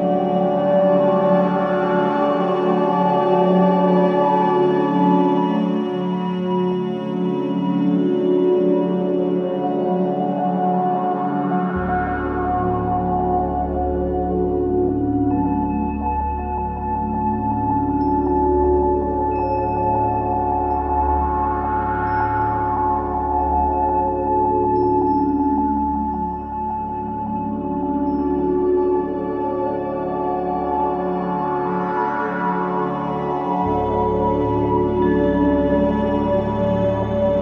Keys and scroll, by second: 0.0 ], 6.0 4, 10.8 9, 10.9 Return, 12.0 2, 13.6 Delete, 14.1 ctrl+z, 14.2 Delete, 15.1 ], 18.7 4, 21.3 3, 24.2 ], 28.1 ], 36.9 Escape.